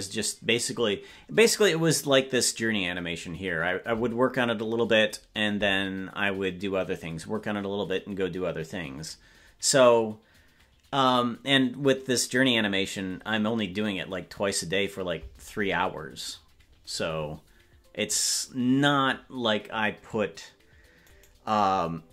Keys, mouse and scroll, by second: 21.0-22.1 right drag.